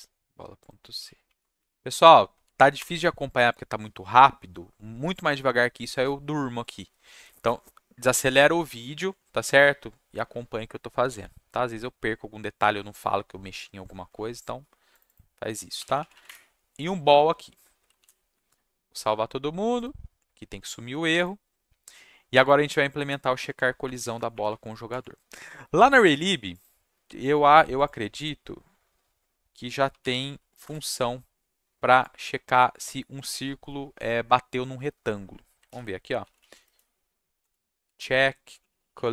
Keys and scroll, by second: 1.4 Return, 1.6 Up, 2.3 ctrl+v, 2.7 Return, 3.7-4.5 typing, 15.5-16.6 typing, 23.4 Tab, 24.1 Return, 24.3 Return, 24.4 Up, 24.9 Tab, 29.6-30.6 typing, 30.6 Return, 35.7 ctrl+f, 36.2 c, 37.4 BackSpace, 37.8 c, 38.4 c, 38.8 l.